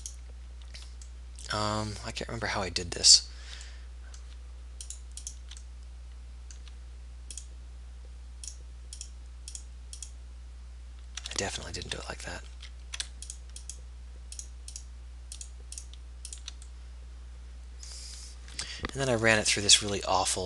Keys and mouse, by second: 1.4 middle click, 1.8 middle click, 2.6-4.0 middle drag, 4.2-5.9 middle drag, 5.9 right click, 6.3 right click, 6.7 middle click, 6.9 right click, 11.6-12.7 ctrl+z, 19.4 middle click, 19.8 z.